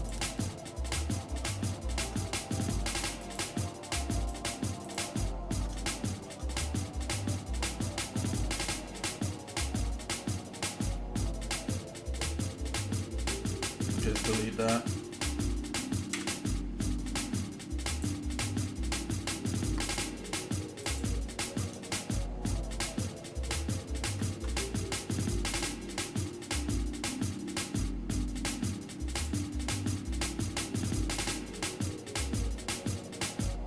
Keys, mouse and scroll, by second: 0.0 click, 0.9 Tab, 1.7 shift+middle click, 3.3 click, 4.2 alt+shift+click, 5.0 alt+shift+click, 5.9 shift+middle click, 6.5 scroll up 1, 7.3 scroll up 1, 7.8 shift+middle click, 8.7 middle click, 9.3-9.7 scroll up 1, 10.7 scroll up 1, 11.0 shift+middle click, 12.3 shift+middle click, 13.6 scroll down 1, 16.1 Delete, 18.6 middle click, 19.6 middle click, 20.8 alt+shift+click, 21.9-23.4 shift+middle drag, 24.1 ctrl+KP_Add, 25.3-27.7 shift+middle drag, 29.4 click, 29.9-31.3 shift+middle drag, 31.4-33.6 shift+middle drag.